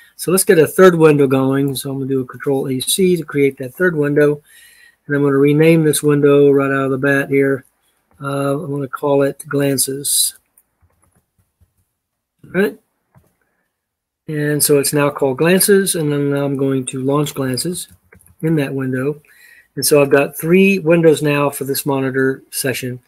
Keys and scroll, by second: 1.8 ctrl+a, 2.7 c, 6.6 ctrl+a, 7.9 ,, 9.1 ctrl+a, 9.4-12.0 typing, 12.9 Return, 17.0-18.5 typing.